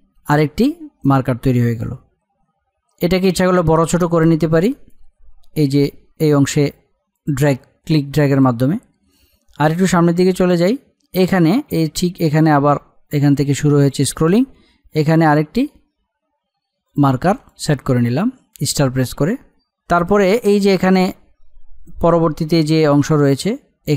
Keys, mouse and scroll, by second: 0.3-23.9 drag.